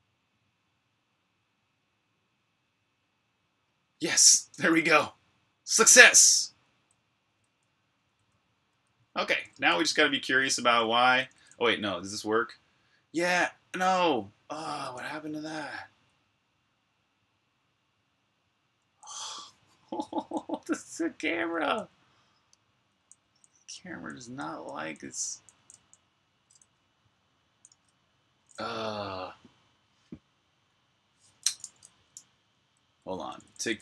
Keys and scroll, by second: 4.7-6.2 typing, 7.6-9.1 typing, 13.2 typing, 15.7 v, 18.6-21.7 typing, 23.0-25.6 typing, 27.5 super+q, 32.0-33.8 typing.